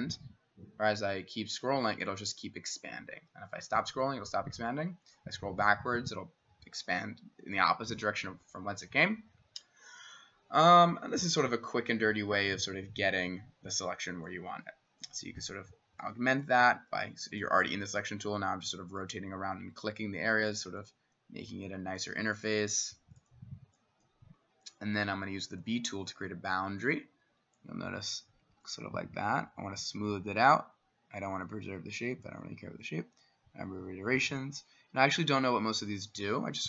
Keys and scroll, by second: 25.6 b.